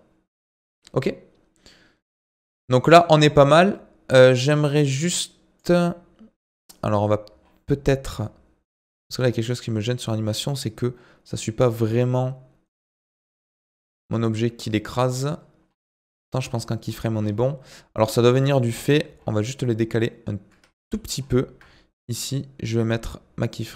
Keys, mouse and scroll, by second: 7.4-8.2 alt+scroll up 2, 8.2 scroll down 2, 8.9-9.4 alt+scroll up 1, 9.4-10.6 alt+scroll down 8, 11.0-11.4 alt+scroll down 3, 12.5-13.2 alt+scroll down 9, 13.5-13.9 alt+scroll down 5, 14.2-14.7 alt+scroll down 3, 15.6-17.7 alt+scroll up 24, 17.7-18.5 alt+scroll down 1, 19.1-19.4 alt+scroll up 1, 19.4-20.3 alt+scroll down 2, 20.7-22.3 ctrl+scroll up 8, 22.3-23.7 drag.